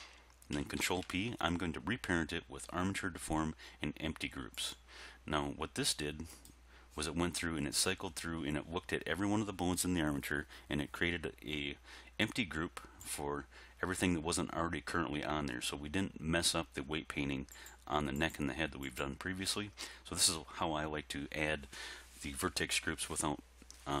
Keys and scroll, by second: 0.8 ctrl+p.